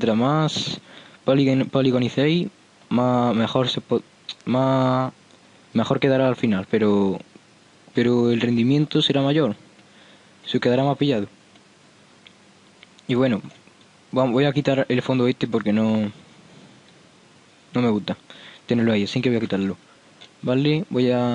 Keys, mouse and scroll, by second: 0.9-4.3 middle drag, 19.7 n.